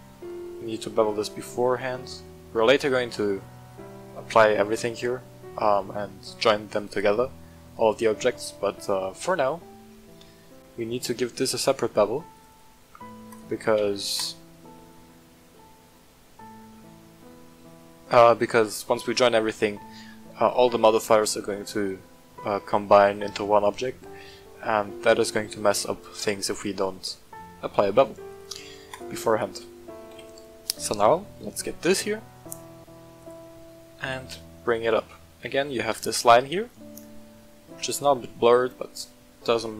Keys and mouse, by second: 0.6-3.1 shift+drag, 6.4 middle click, 8.0 middle drag, 9.1 middle click, 10.1-12.3 shift+middle drag, 12.3 click, 13.3 click, 13.7 w, 15.3-16.6 middle drag, 18.7 middle drag, 26.5-26.9 middle drag, 28.3-28.9 drag, 29.3 right click, 30.1 KP_1, 30.9 shift+middle drag, 33.1 click, 34.0 g, 34.2 z, 34.8 click, 35.5 shift+middle click, 37.4 shift+middle drag, 37.8 g, 38.0 z.